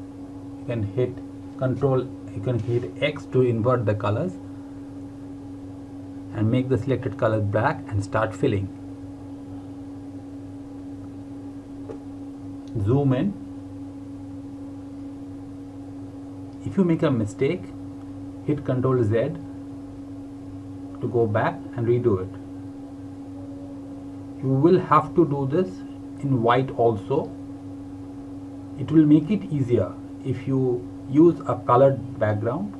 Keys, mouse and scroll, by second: 2.2 click, 9.2-9.8 scroll up 1, 9.8-11.3 scroll down 1, 11.3 Left, 11.5-11.9 scroll up 2, 12.9 click.